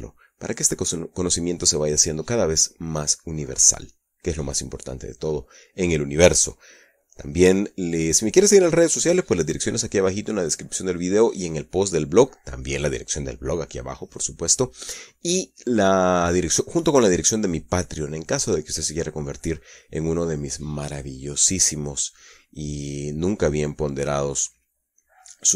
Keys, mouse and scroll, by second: 24.9-25.5 middle drag.